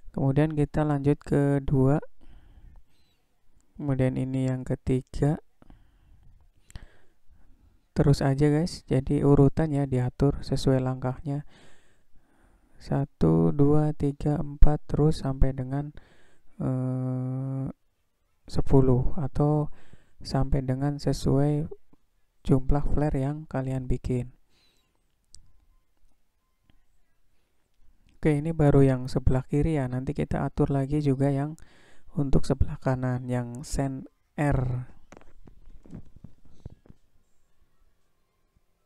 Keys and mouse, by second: 1.0-2.2 drag, 3.3 click, 4.3-5.7 drag, 8.0 click, 9.6 click, 10.9 click, 12.6-14.3 drag, 15.1 click, 16.4-17.8 drag, 18.7 click, 20.0-21.4 drag, 22.3 click, 23.2-24.4 drag, 26.0 click, 29.0-30.5 drag, 33.1-34.6 drag.